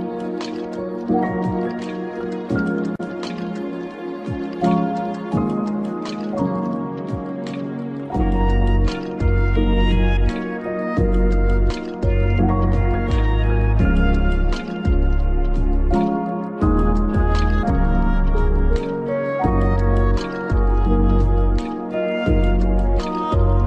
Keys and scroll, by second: 9.6 ctrl+0.